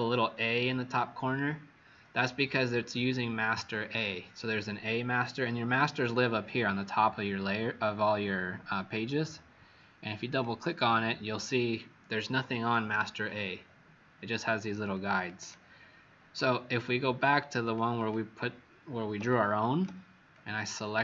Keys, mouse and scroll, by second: 10.7 click.